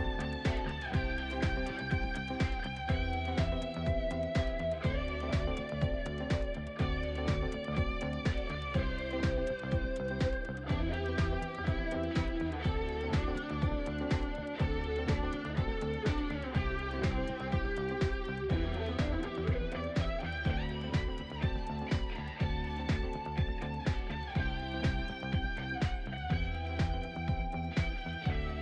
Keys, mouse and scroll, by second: 1.3 click, 5.6-7.1 drag, 7.6-10.8 drag, 12.2 click, 12.2 scroll down 3, 12.4-13.9 shift+middle drag, 17.7-20.5 drag, 20.5-21.3 middle drag, 21.3 click, 24.2 click, 25.5-27.8 shift+middle drag, 27.8-28.4 drag.